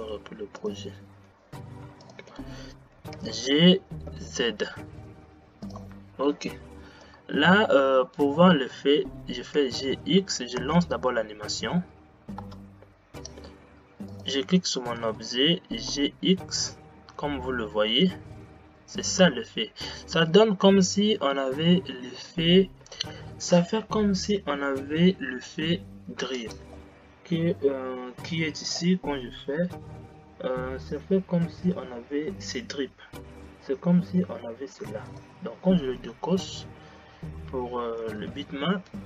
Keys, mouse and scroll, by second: 0.6 click, 1.1 n, 2.1 click, 3.2 g, 7.1-9.7 middle drag, 9.7 g, 12.5 space, 13.3 click, 14.2 click, 15.1 g, 28.7 click, 29.5 scroll down 5, 30.1 scroll down 5, 35.2 click, 36.5 click, 38.2 g.